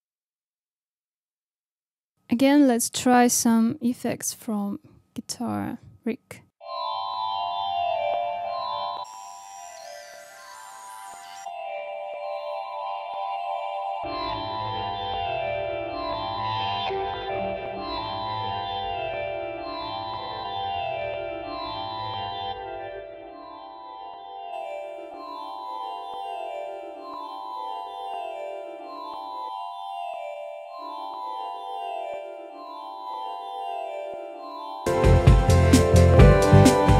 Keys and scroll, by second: 0.4 space, 0.9 space, 1.4 super+d, 1.9 super+d, 6.5 space.